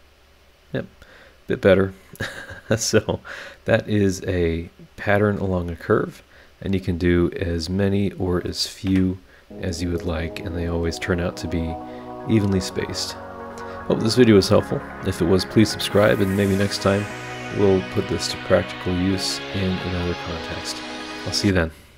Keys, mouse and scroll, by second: 0.6-1.2 scroll up 3, 1.9 scroll up 2, 2.6-3.9 scroll down 3, 4.0-4.6 scroll up 3, 5.1-5.9 scroll down 4, 6.1-6.6 scroll up 3, 7.8 click, 8.9 BackSpace, 10.3 click, 11.1 scroll down 2, 11.5-12.1 scroll up 3, 12.5 scroll down 2, 13.4 click, 16.1 click, 18.0 middle click, 18.7-21.2 drag, 20.3 right click.